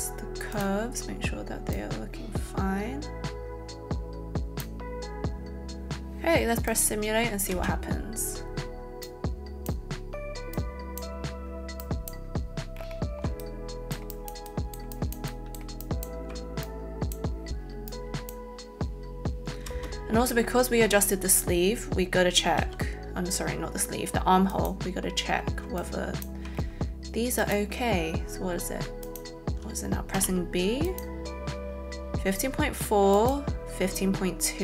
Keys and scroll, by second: 7.5 space, 19.7 space, 22.6 b, 30.2 b.